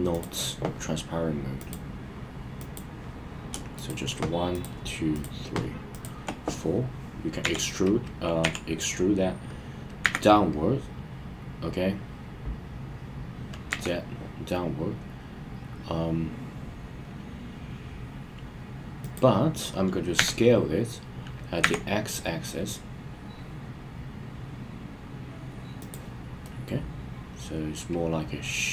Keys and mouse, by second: 0.2 click, 1.6 click, 2.7 click, 7.4 w, 8.4 e, 10.0 z, 13.7 z, 19.0 click, 20.2 s, 21.6 x, 25.8 click, 26.5-28.7 middle drag.